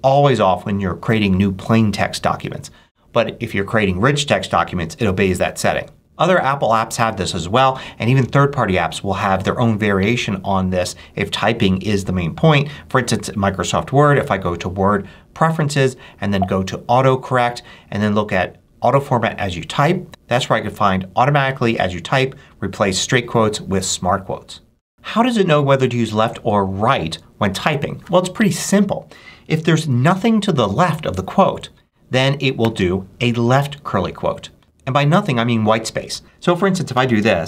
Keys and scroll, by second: 32.5 shift+', 34.5 BackSpace, 36.2-37.4 typing.